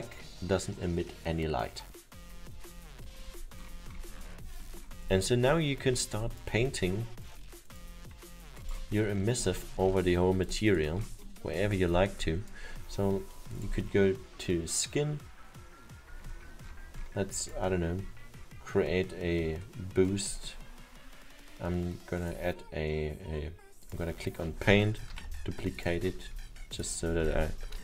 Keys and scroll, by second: 25.1 ctrl+d, 27.7-27.8 typing.